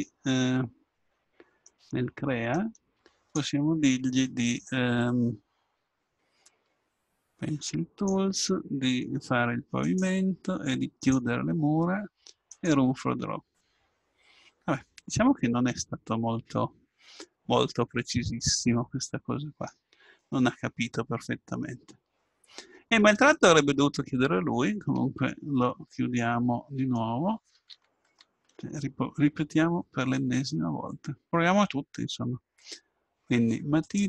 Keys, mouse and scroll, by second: 1.6-4.3 drag, 7.7-9.5 drag, 9.8-13.6 drag, 13.6-15.4 middle drag, 24.8 ctrl+z, 27.7 ctrl+z, 28.0 ctrl+z, 29.3 KP_7, 33.8-34.0 drag.